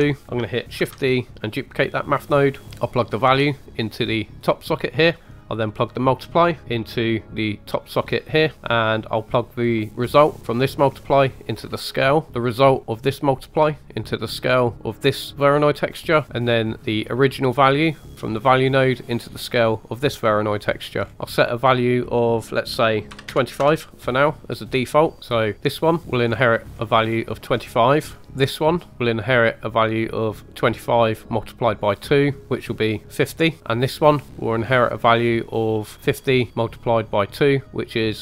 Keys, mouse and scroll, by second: 0.2 ctrl+z, 0.2 right click, 0.8 shift+d, 2.6 click, 3.4 drag, 5.9 middle click, 6.4 click, 8.5 middle click, 10.2 click, 12.0 middle click, 12.3 click, 12.3-12.9 scroll down 2, 12.9 click, 15.8 middle click, 16.2 right click, 17.0 click, 17.3 drag, 20.9 scroll down 3, 21.1 middle click, 21.1-21.6 scroll up 4, 21.9-23.8 drag, 25.2 middle click, 25.2 scroll down 1, 25.4 click, 26.3-27.5 scroll up 3, 26.7 middle click, 28.5 click, 29.7 right click, 32.4 click, 33.6 click, 34.9 click.